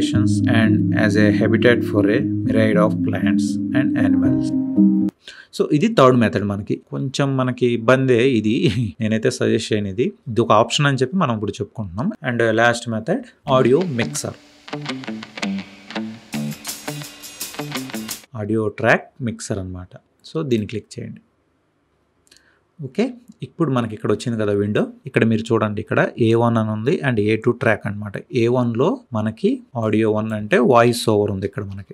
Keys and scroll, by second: 14.0 Delete.